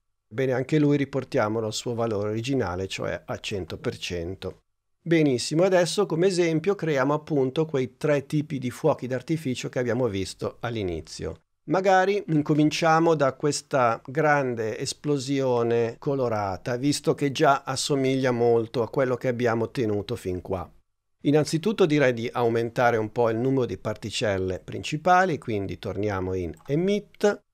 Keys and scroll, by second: 8.6 super+Tab.